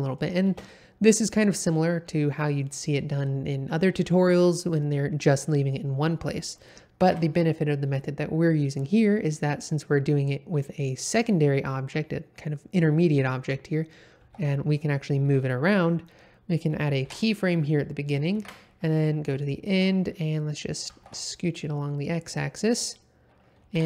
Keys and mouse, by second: 0.4 space, 7.0 shift+Left, 14.2 g, 14.3 x, 15.2 Escape, 18.3 shift+Right, 19.4-19.7 shift+middle drag, 20.2 middle click, 20.8 g, 21.0 x, 22.6 click, 23.7 i.